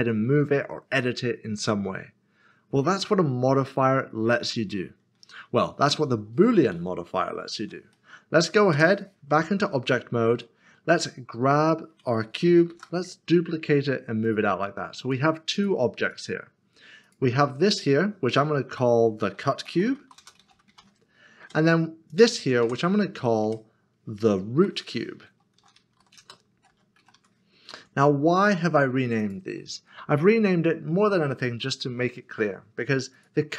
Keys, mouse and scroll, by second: 5.5 ctrl+z, 6.8 ctrl+z, 7.9 middle click, 8.7 Tab, 10.4 Tab, 10.6 middle click, 12.7 typing, 14.2 d, 17.3 click, 18.7 F2, 19.6-20.8 typing, 21.9 typing, 22.1 click, 22.6 Tab, 24.6 F2, 25.6-27.1 typing, 29.2 click, 30.1 middle click, 33.1 middle click.